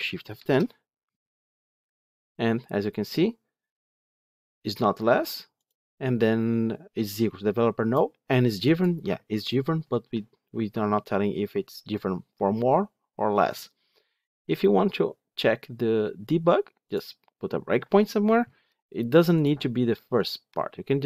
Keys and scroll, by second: 0.3 ctrl+shift+F10, 16.8 ctrl+F8.